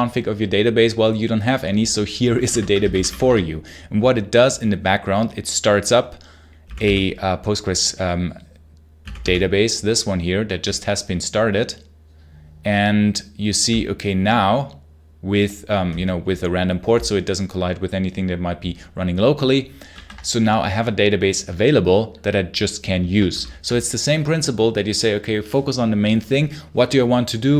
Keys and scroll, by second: 2.4 Return, 2.4-3.3 typing, 19.8 super+q, 23.2 super+l.